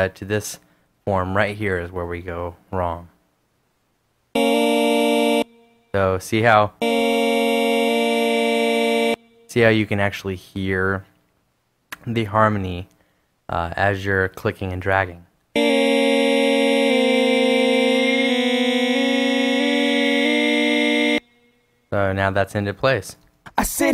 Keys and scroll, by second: 23.7 space.